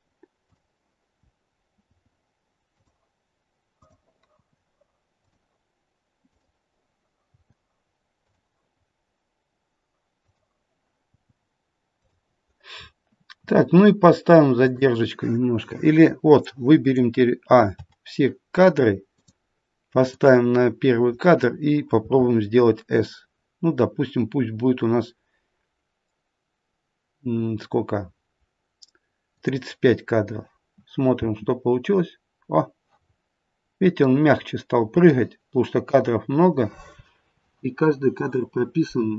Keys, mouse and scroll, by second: 0.5 click, 1.8 i, 3.9 click, 4.3 i, 6.3 click, 7.2 i, 10.2 click, 11.0 i, 12.7-13.2 scroll down 5, 13.9-14.6 scroll down 6, 14.6 click, 17.7 a, 19.1 click, 20.1 click, 22.0 s, 31.2 space, 33.0-34.1 scroll up 1, 34.1-35.0 scroll up 1, 35.0 middle click.